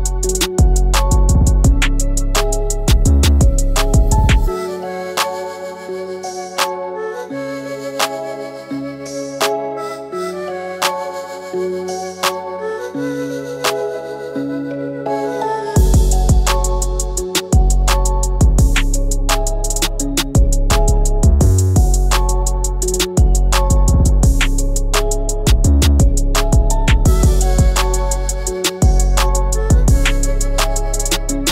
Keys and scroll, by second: 4.1 Right, 10.5 ctrl+alt+`, 24.3 ctrl+x, 25.8 ctrl+b, 28.7 ctrl+g.